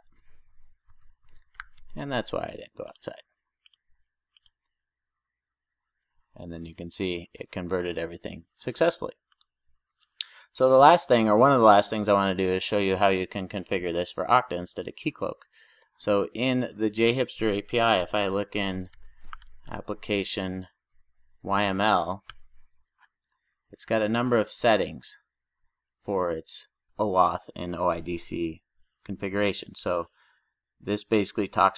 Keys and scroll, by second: 18.0 ctrl+shift+super+o.